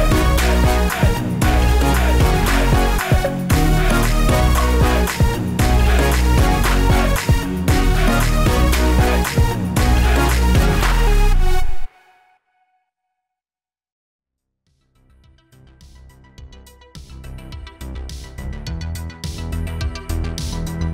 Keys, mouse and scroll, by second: 1.0 ctrl+z, 1.2 click, 3.8 s, 4.8 click, 7.9 shift+d, 8.8 click, 11.6 shift+d, 12.2 click, 13.8 shift+d, 14.6 click, 15.6 shift+click, 16.0 shift+click, 17.4 shift+d, 18.3 click, 20.1 shift+d.